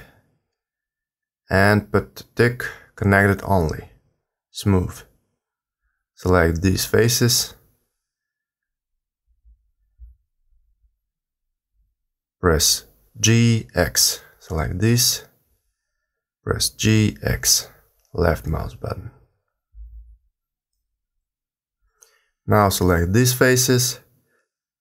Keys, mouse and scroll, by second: 1.0 click, 5.8 click, 6.8 shift+click, 8.0 g, 14.2 click, 15.0 shift+click, 16.0 g, 22.4 click, 23.3 shift+click, 24.0 click.